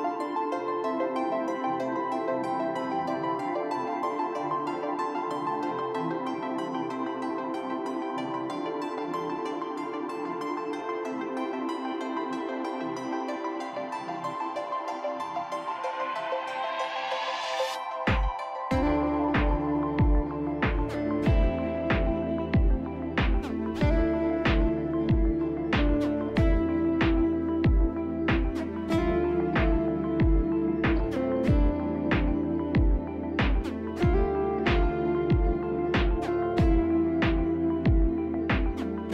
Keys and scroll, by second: 1.3 s, 2.4 b, 5.1 F4, 5.9 F4, 6.0 F4, 7.0 F4, 8.1 c, 11.5 F4, 12.8-15.1 typing, 16.1 F4, 27.7 ctrl+z, 37.1 F3, 37.8 F3.